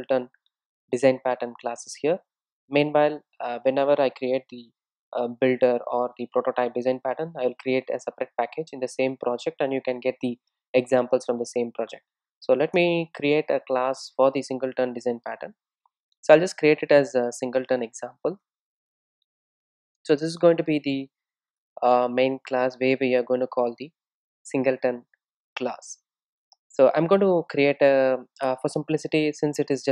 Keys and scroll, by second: 24.1 Tab.